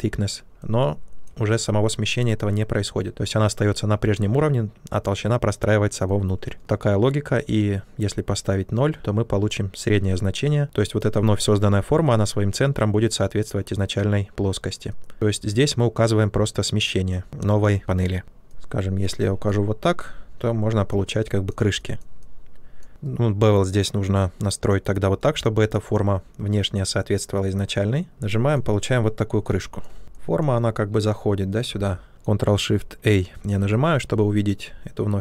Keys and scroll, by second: 6.5 ctrl+z, 18.2 ctrl+z, 31.6 ctrl+z, 33.2 ctrl+shift+a.